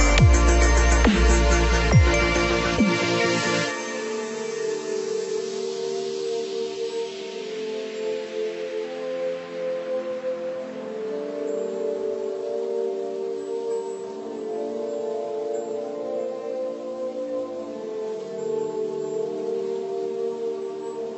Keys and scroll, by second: 4.5 Up, 5.3 Left, 6.3 Right, 6.7 Up, 13.5 Delete, 16.7 Delete, 17.9 Delete, 18.6 Delete, 19.6 Delete, 20.2 Delete.